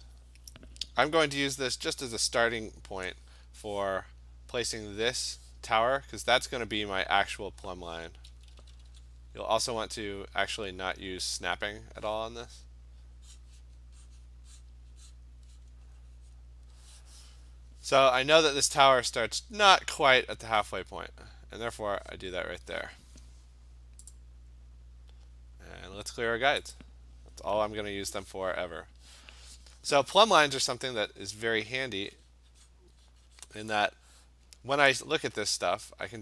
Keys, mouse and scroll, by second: 7.0 click, 7.4 click, 8.3 [, 8.6 [, 8.7 [, 8.9 [, 9.8 click, 11.7 click, 13.5 click, 14.2 click, 14.7 click, 15.2 click, 16.0 click, 16.4 click, 21.9 click, 22.2 click, 24.2 click, 26.8 click, 31.5 click, 31.8 click, 32.2 click, 32.8 click, 33.1 click, 33.5 click.